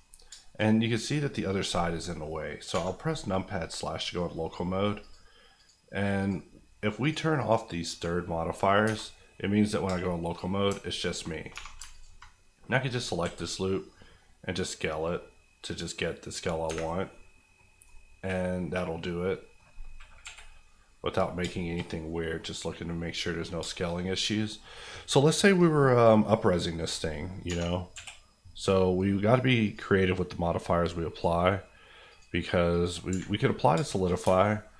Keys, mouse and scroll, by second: 0.3 shift+Tab, 0.3 shift+middle click, 0.6 middle click, 2.3-2.7 scroll up 1, 2.7 KP_Divide, 3.6-5.0 scroll up 1, 5.0 click, 8.8 Tab, 9.3-9.9 scroll up 1, 9.9 shift+scroll up 1, 10.0 shift+middle click, 10.4 middle click, 10.6 alt+middle click, 10.9 alt+click, 11.3 click, 11.5 2, 11.9 alt+click, 12.3 click, 13.2 s, 16.3 click, 16.6 Tab, 16.8 scroll down 1, 17.1 middle click, 18.1 middle click, 20.2 KP_1, 21.2-21.5 scroll down 2, 21.5 shift+middle click, 21.8 middle click, 23.1 middle click, 23.6 shift+middle click, 26.5-26.8 scroll down 1, 27.9 KP_1, 29.6 click, 33.1 Escape, 33.3 middle click, 33.7 shift+middle click, 34.1 shift+scroll up 2, 34.2 Tab, 34.5 middle click.